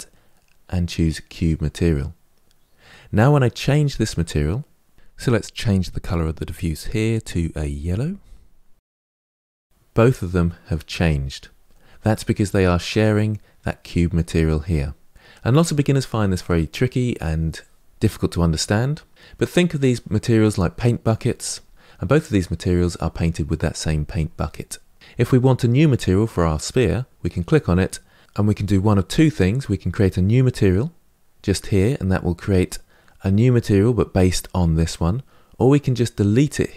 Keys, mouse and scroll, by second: 1.2-3.3 drag, 8.8 click, 26.5 click.